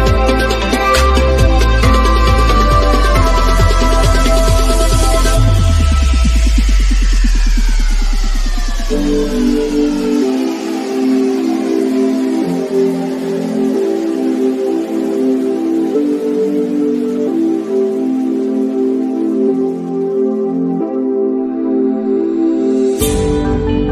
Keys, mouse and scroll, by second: 0.5-4.7 middle drag, 4.7 click, 6.0-6.5 scroll up 1, 6.6-6.9 scroll up 1, 7.4 click, 8.4 Right, 14.3 click, 16.2-17.0 scroll down 1, 17.0 middle click, 17.6 scroll down 1, 18.2 click, 18.7-23.9 shift+middle drag.